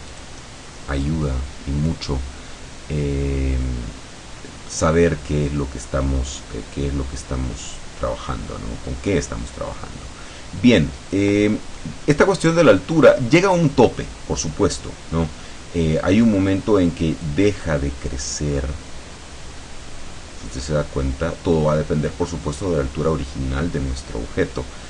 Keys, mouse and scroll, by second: 0.2 click, 1.0 click, 6.5-11.4 drag, 11.5 scroll down 1, 12.2-12.5 scroll down 1, 12.7-16.5 drag, 17.3-22.9 drag.